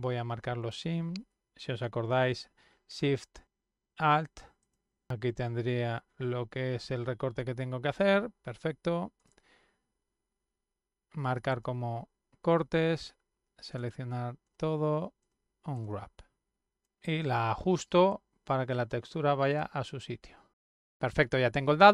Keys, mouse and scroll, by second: 0.0 click, 0.5 click, 1.7 alt+shift+click, 2.4 middle click, 2.7 middle click, 3.3 alt+shift+click, 3.5 middle click, 3.8 alt+shift+click, 3.9 middle click, 4.1 alt+shift+click, 4.2 middle click, 4.9-8.2 middle drag, 9.1 click, 11.5 click, 13.7 click, 14.4 click, 15.2 click, 15.7 click, 17.2 click, 18.1 click, 19.4 click, 20.3 middle click, 21.0-21.9 middle drag.